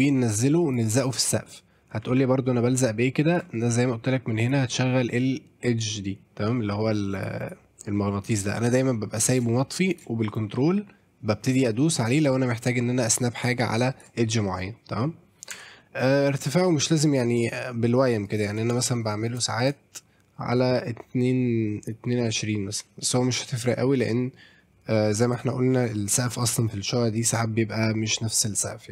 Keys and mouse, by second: 0.0-0.6 drag, 0.7-3.4 ctrl+drag, 4.4-7.1 drag, 8.4 click, 9.9 click, 10.4-14.0 ctrl+drag, 15.5 Tab, 15.8 middle click, 16.3 middle click, 16.8-18.4 shift+drag, 18.2 middle click, 18.2 right click, 18.8 shift+click, 19.6-28.9 shift+drag.